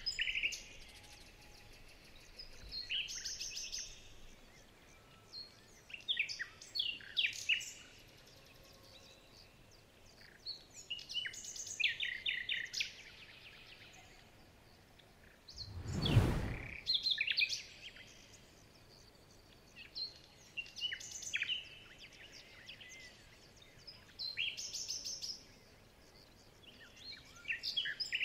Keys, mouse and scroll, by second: 5.1-5.4 alt+scroll down 2, 5.6-6.5 alt+scroll up 6, 6.5-6.9 alt+scroll down 3, 7.5 alt+scroll down 1, 7.6 alt+scroll up 2, 7.8 alt+scroll down 1, 8.9 alt+scroll down 1, 9.1 alt+scroll up 2, 9.4-9.7 alt+scroll down 1, 9.7 alt+scroll up 1, 11.2 ctrl+z, 11.6 alt+scroll up 4, 11.8 alt+scroll down 2, 12.1-12.6 alt+scroll up 1, 13.0 alt+scroll down 2, 13.2 alt+scroll up 4.